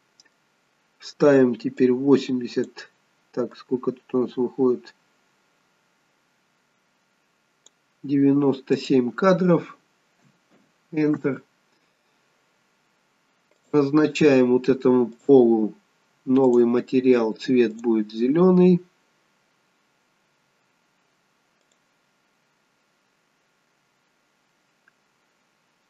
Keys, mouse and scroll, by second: 1.8 click, 3.5 click, 8.7 click, 12.4 scroll down 3, 13.5 click, 15.0 click, 16.4 click.